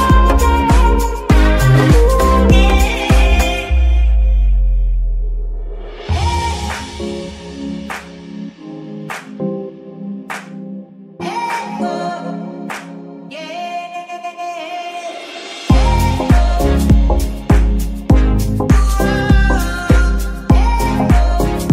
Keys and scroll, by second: 2.0 shift+KP_3, 2.7 s, 5.6-7.9 typing, 9.6 g, 11.9 r, 15.2 KP_3, 15.8 g, 17.9 g, 19.7 r, 19.8 s.